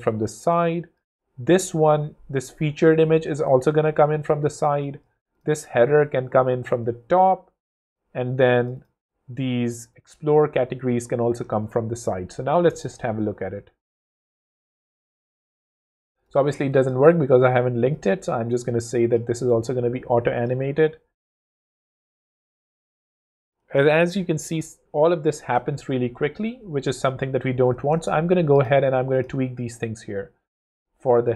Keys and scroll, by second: 11.8 shift+w, 12.4 w, 20.5 w.